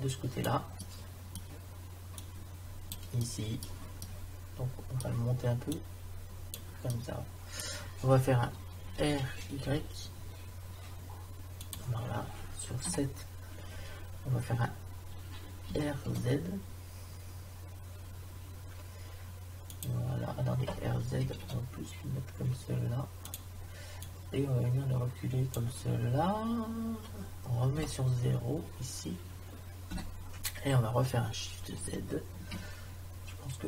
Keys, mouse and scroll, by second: 0.8 middle click, 2.2 click, 5.7 click, 6.9 middle click, 9.0 r, 12.9 KP_7, 15.7 r, 21.2 r, 24.0-25.7 drag, 27.8 KP_0, 29.9 KP_0, 32.6 shift+z.